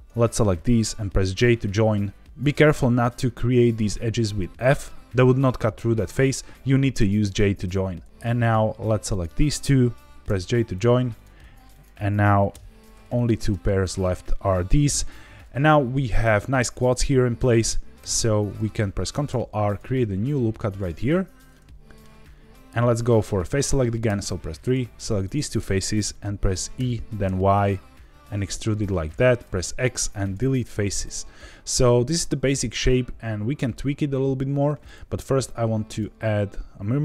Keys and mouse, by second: 1.3 j, 8.3 click, 9.0 shift+click, 10.2 j, 11.1 click, 11.8 shift+click, 12.5 j, 13.2 click, 14.8 j, 17.9 3, 19.1 ctrl+r, 21.5 middle click, 24.0 3, 24.6 click, 26.7 e, 27.2 y, 29.0 click, 29.4 x, 31.0-32.0 middle drag, 35.9-37.0 drag.